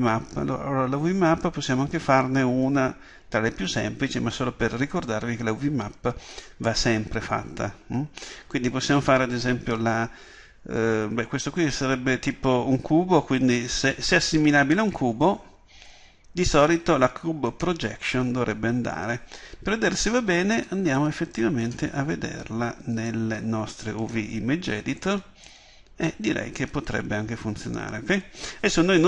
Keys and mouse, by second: 20.7-29.0 middle drag.